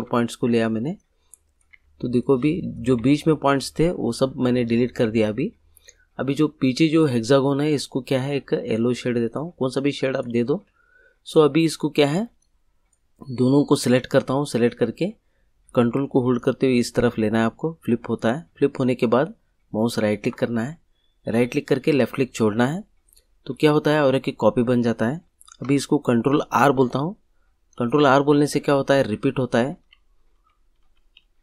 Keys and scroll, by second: 1.7 Delete, 26.6 ctrl+r, 29.4 ctrl+r.